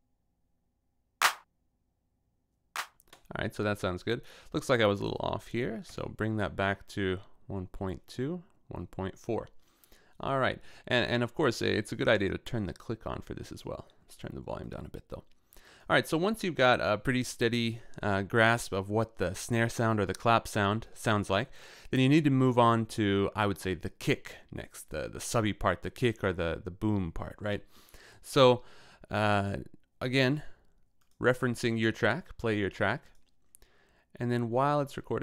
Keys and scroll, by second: 3.0 space, 5.9 Left.